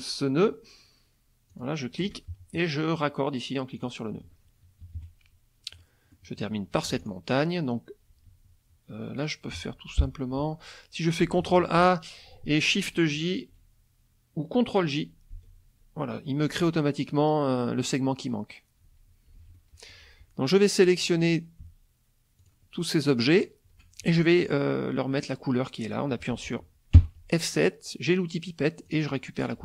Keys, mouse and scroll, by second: 1.5 ctrl+click, 3.8 click, 4.8 KP_Subtract, 5.8 click, 6.9 F1, 7.0 click, 9.5 F2, 11.4 ctrl+a, 15.3 ctrl+j, 19.4 F1, 19.6 click, 22.4 shift+click, 23.3 shift+click, 26.9 F7, 28.9 click.